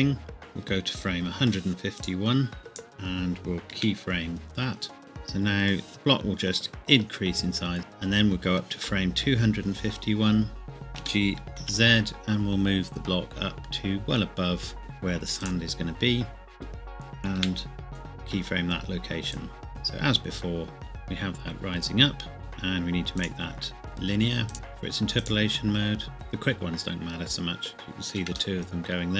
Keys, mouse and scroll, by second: 2.2 click, 3.8 i, 5.0 click, 11.0 g, 11.6 z, 15.4 click, 17.4 i, 17.9 click, 19.6 click, 22.4 click, 23.2 right click, 25.2 click, 28.0 shift+middle click, 28.6 shift+middle click.